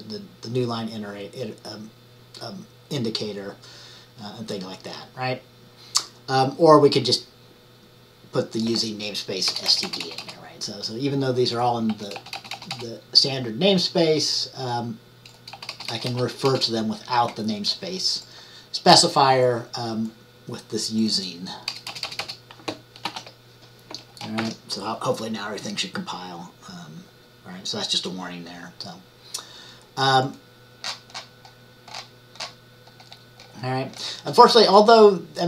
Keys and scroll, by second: 9.8 typing, 15.6 ▯, 22.0 ▯, 23.2 ctrl+s, 24.0 typing, 24.5 ctrl+@.